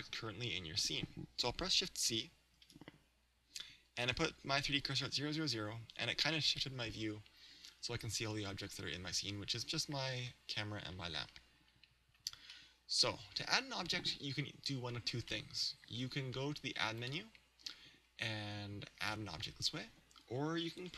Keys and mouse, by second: 2.6 shift+c, 16.4-18.4 middle drag, 17.0 click.